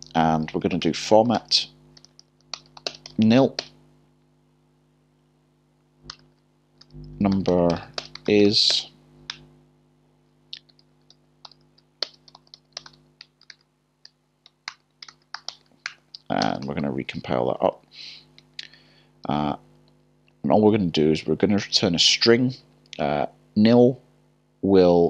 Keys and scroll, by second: 0.5 o, 2.0 typing, 7.1 ", 10.7 typing, 14.1 typing, 14.7 ctrl+z, 17.3-19.4 typing, 21.5 typing.